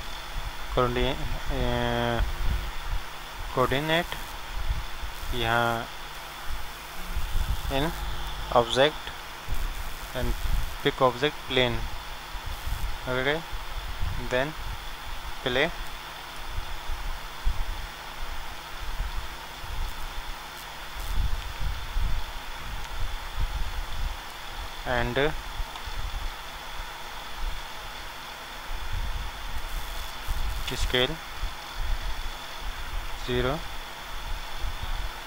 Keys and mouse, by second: 4.8-12.1 drag, 13.9-16.3 drag, 19.6-22.0 drag, 23.7 shift+a, 28.0-29.8 drag, 33.1 KP_0.